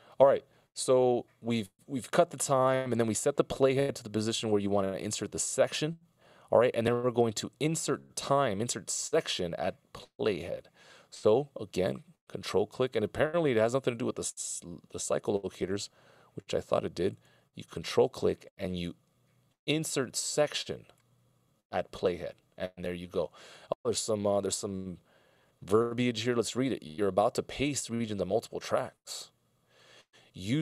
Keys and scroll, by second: 13.8 c.